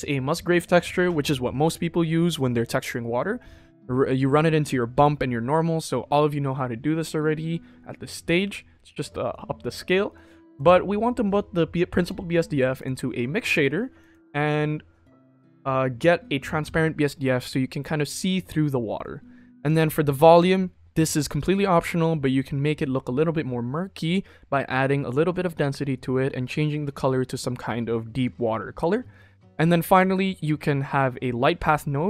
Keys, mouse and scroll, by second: 9.2-9.7 middle drag, 10.0-10.4 middle drag, 11.9 click, 12.7 click, 13.9 click, 19.6 click, 29.5-29.9 middle drag.